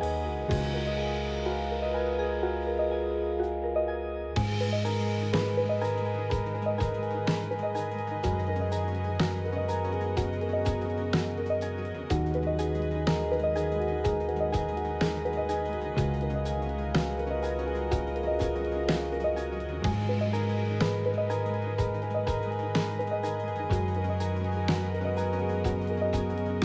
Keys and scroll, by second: 3.4 f, 10.2 shift+z, 12.8 KP_7.